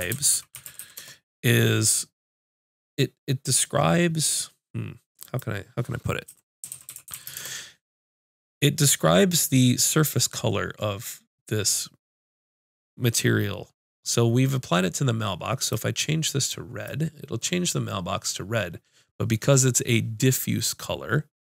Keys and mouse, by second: 15.6-21.5 drag.